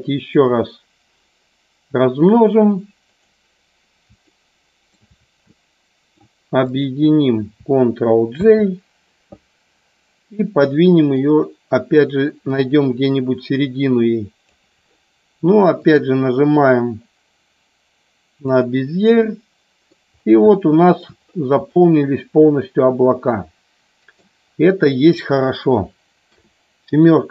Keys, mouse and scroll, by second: 3.2 click, 4.4 shift+middle click, 5.5 shift+middle click, 6.6 shift+click, 8.4 ctrl+j, 11.3-14.5 drag, 15.8-18.6 drag, 19.3 scroll up 1, 19.4 middle click, 19.8 scroll down 1, 20.5 shift+middle click, 20.9 scroll down 1, 21.7 scroll up 1, 21.8-24.3 middle drag, 26.1 KP_7.